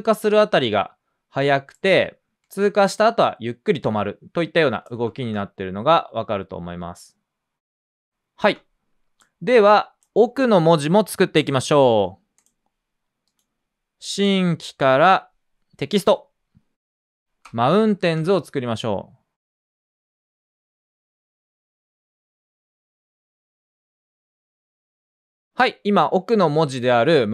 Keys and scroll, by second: 5.2 space, 8.4 space, 16.9-19.0 typing.